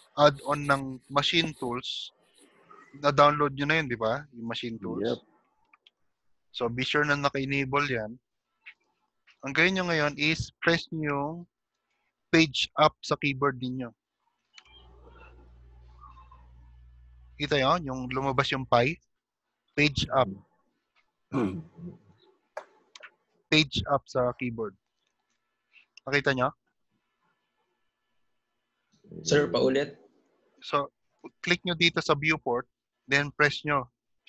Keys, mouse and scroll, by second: 2.3 F4, 9.7 shift+middle click, 11.1 Page_Down, 14.6 Page_Up, 23.0 Page_Up, 31.2 click.